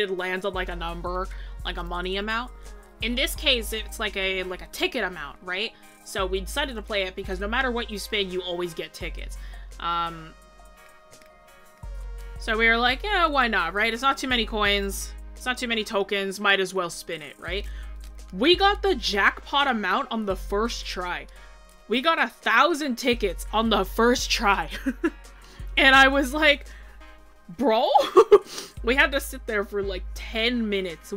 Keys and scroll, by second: 7.8 scroll, 8.8 scroll up 1.